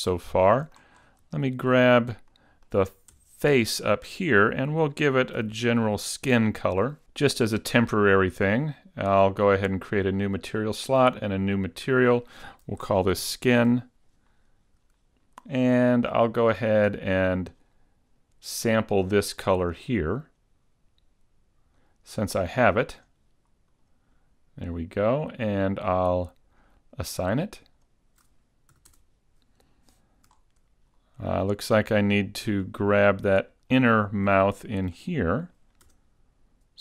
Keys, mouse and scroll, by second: 0.1-0.7 scroll up 2, 0.5 shift+middle click, 1.1-1.4 scroll up 2, 1.4 shift+middle click, 2.4 shift+middle click, 3.4 Tab, 5.5 l, 8.6 click, 9.8 click, 11.1 click, 12.0 click, 15.6 middle click, 18.9 click, 20.3 click, 21.9 click, 26.0 click, 27.7 click, 28.9 a, 29.2 Tab, 30.4-30.9 scroll up 3, 31.0 scroll down 2, 31.4 middle click, 32.7-33.1 scroll up 2, 33.1 shift+middle click, 34.0 scroll up 2, 34.6 shift+middle click, 35.2 middle click, 36.2 Tab.